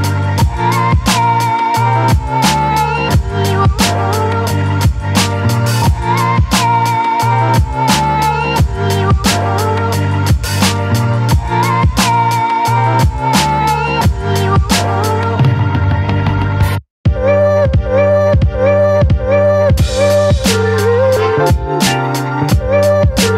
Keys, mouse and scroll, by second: 2.4 ctrl+e, 3.8-5.4 drag, 5.4 ctrl+a, 5.9 ctrl+c, 6.8 click, 9.8 ctrl+v, 10.8 right click, 12.6 click, 13.9 ctrl+t, 15.2 alt+click, 17.9 space, 18.2-19.5 ctrl+drag, 19.5-23.3 alt+drag.